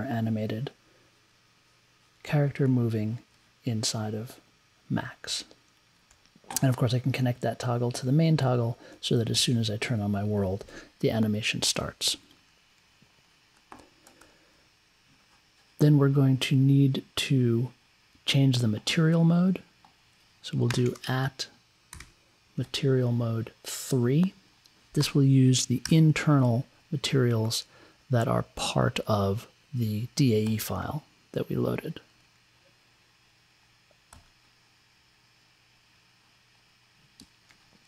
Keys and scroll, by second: 20.7-22.6 typing, 24.9 space, 25.8 3.